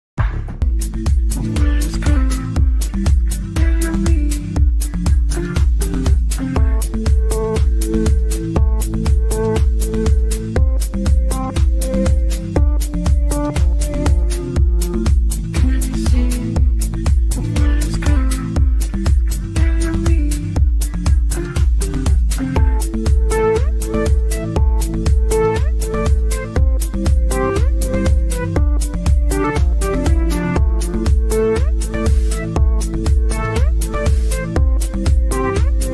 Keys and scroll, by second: 16.3 Delete, 19.2 ctrl+z, 21.0 ctrl+z.